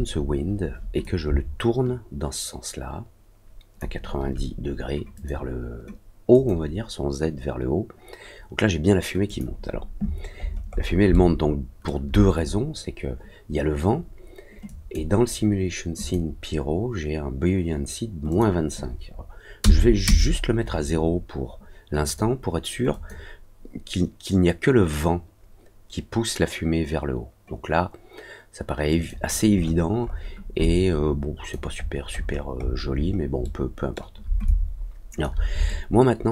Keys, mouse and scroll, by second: 1.0-3.7 shift+drag, 5.1 click, 6.3 click, 9.2 click, 10.3 scroll down 1, 10.7 scroll up 1, 10.8 scroll down 1, 11.1 alt+middle click, 14.6 click, 15.9 click, 18.2 click, 22.0 click, 22.9 click, 28.8 click, 29.5 middle click, 30.0 middle click, 30.6 alt+click, 31.7 alt+scroll down 1, 32.1 alt+scroll up 1, 32.2-33.2 alt+scroll down 3, 33.4 alt+middle click, 34.4 alt+click, 35.6 alt+middle click.